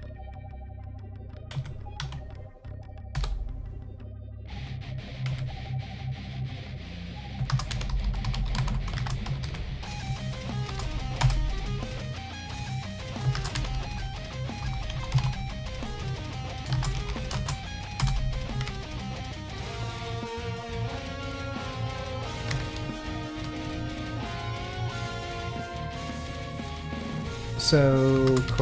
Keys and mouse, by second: 0.6-1.2 drag, 1.5 Tab, 2.0 a, 3.1 p, 5.3 Tab, 6.3-11.8 drag, 8.0 l, 12.4 click, 12.5-18.6 drag, 13.8 l, 19.0 ctrl+click, 20.0 middle click, 21.5 middle click, 22.5 c, 23.7-25.8 middle drag, 26.9-28.6 drag.